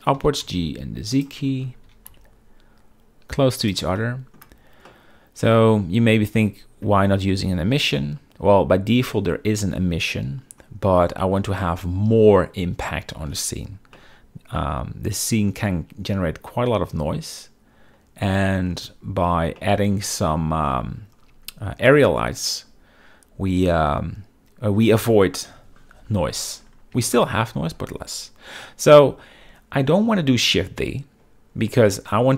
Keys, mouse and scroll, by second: 0.0-0.5 typing, 2.0 g, 2.2 z, 4.1-4.5 middle drag, 5.0-6.5 middle drag, 14.1-15.6 middle drag, 19.7-20.8 middle drag, 25.6 KP_7, 26.2 z, 27.2 shift+middle drag.